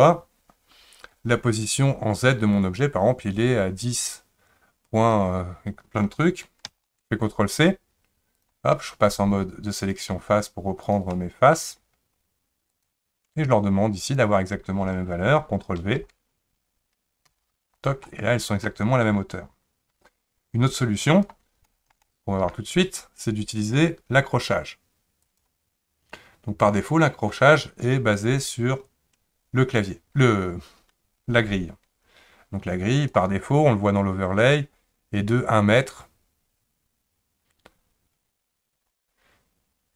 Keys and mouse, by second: 4.1-8.4 drag, 9.9 click, 10.8 click, 11.1 middle click, 12.7 ctrl+click, 14.2-17.3 drag, 18.0 middle click, 20.7 click, 21.6 shift+middle click, 22.0 middle click, 25.2 click, 28.4-33.2 drag, 34.4-39.1 drag.